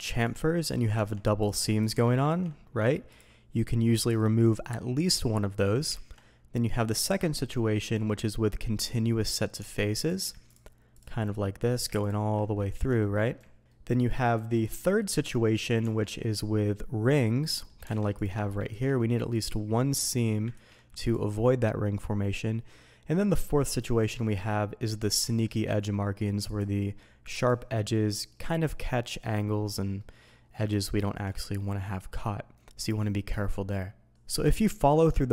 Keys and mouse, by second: 0.2 click, 0.9 Tab, 1.4 click, 1.8 shift+click, 2.2 ctrl+e, 5.8 ctrl+z, 9.5 Tab, 10.0 click, 10.4 ctrl+click, 11.2-11.6 middle drag, 12.7 ctrl+drag, 13.0 middle drag, 13.6-14.1 middle drag, 14.3 middle click, 15.1 middle click, 15.8 Tab, 16.2 middle click, 17.5 middle click, 17.9 alt+a, 18.1 click, 18.7 ctrl+e, 19.8 click, 20.6 ctrl+e, 24.2-24.8 middle drag, 25.0 alt+a, 25.2 middle drag, 26.4-27.4 drag, 27.9-28.3 middle drag, 30.0 middle drag, 30.8 shift+middle click, 33.3-34.1 middle drag, 34.1 alt+a, 34.5 middle click.